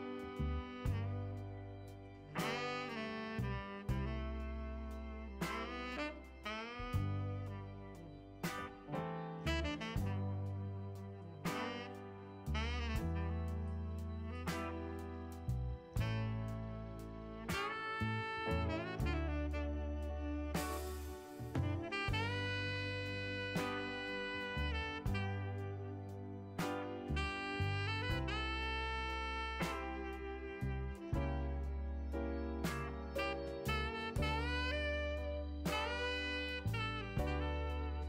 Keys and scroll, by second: 14.3 ctrl+z.